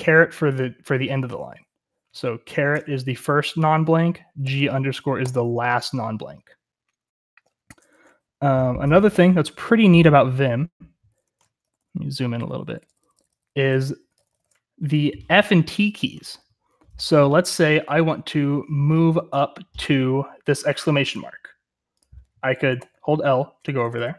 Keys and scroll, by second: 2.7 shift+6, 4.4 ctrl+g, 5.1 =, 9.1 0, 13.3 ctrl++, 14.5 ctrl++, 14.5 typing, 22.7-23.2 l, 23.3 l, 23.7 l, 23.9 l.